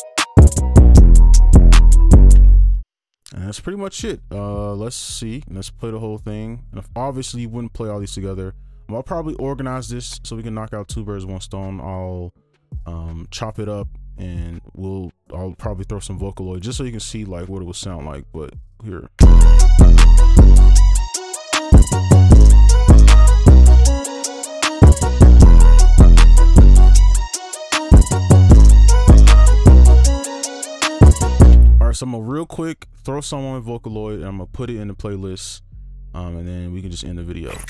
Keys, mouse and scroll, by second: 2.3 space, 6.1 double click, 18.7 double click, 19.1 space, 31.5 space.